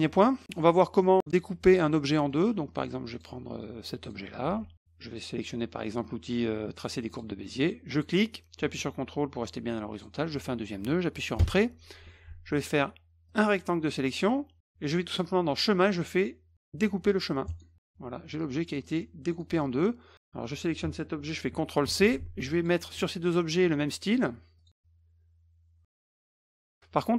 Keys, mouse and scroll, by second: 0.4 middle click, 1.0 middle click, 2.1 middle click, 3.1 click, 3.6-4.1 drag, 4.5 ctrl+z, 7.1 click, 7.9 click, 9.9 ctrl+click, 11.4 Return, 12.0 F1, 13.3 click, 15.0 click, 17.5 click, 18.8-19.4 drag, 21.8 ctrl+c, 22.5 click, 23.2 shift+click, 24.6 click, 26.0 click, 26.6 click.